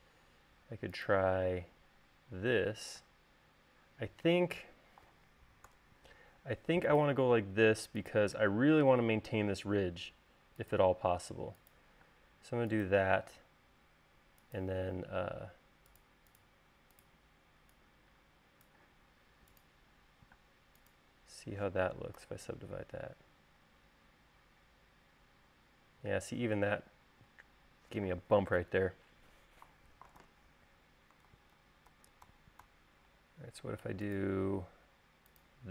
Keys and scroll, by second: 1.0 l, 3.2 space, 5.9 BackSpace, 12.3 space, 20.7 space, 22.5 u, 30.5 super+z, 31.6 super+z.